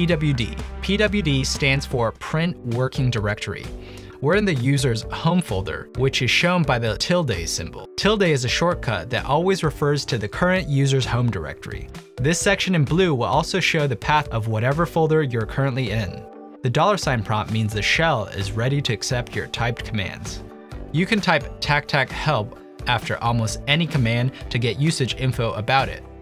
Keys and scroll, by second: 0.2-0.9 typing, 10.5-11.6 typing, 16.8-18.9 typing, 20.9-23.2 typing.